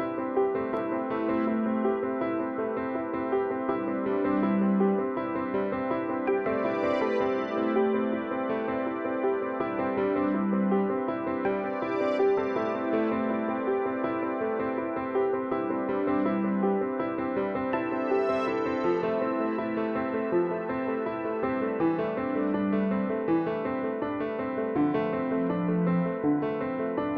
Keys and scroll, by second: 1.5 ctrl+t, 11.7 Return, 26.5 ctrl+c.